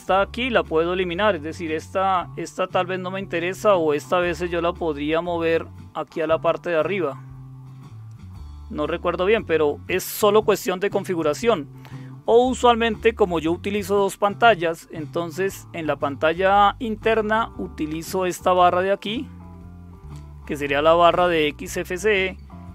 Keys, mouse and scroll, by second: 4.7-8.1 drag, 11.0 click, 18.4 click, 19.0 click.